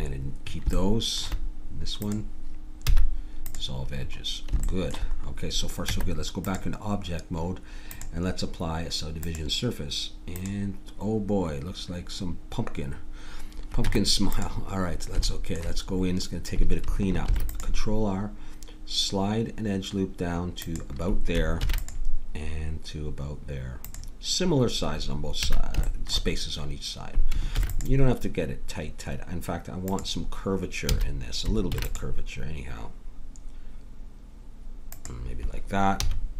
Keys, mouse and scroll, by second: 2.0 click, 2.8 x, 5.9 Tab, 7.9-13.8 drag, 13.8 Tab, 17.3 ctrl+r, 21.6 ctrl+r, 25.4 a, 25.9-27.6 drag, 27.6 ctrl+r, 30.9 a, 31.7 ctrl+r, 36.0 a.